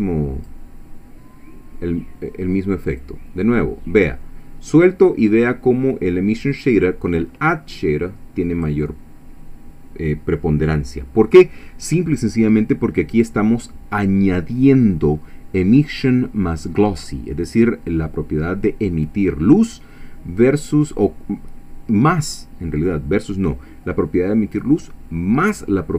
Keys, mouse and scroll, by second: 3.0-8.9 drag.